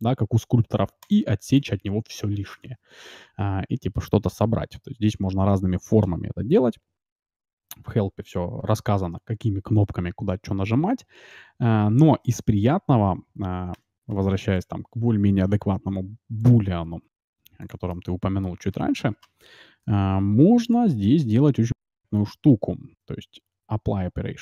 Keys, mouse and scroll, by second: 1.5-3.2 middle drag, 14.2 x, 15.4 shift+a, 17.0 s, 17.8-20.5 middle drag, 20.7 ctrl+shift+x.